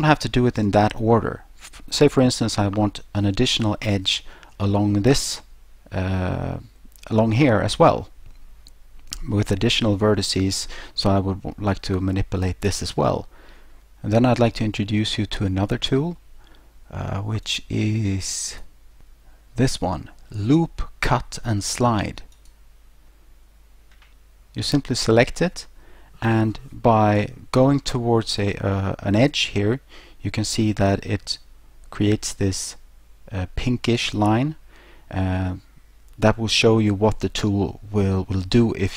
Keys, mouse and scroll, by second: 17.5 click, 18.5 click, 22.4 click.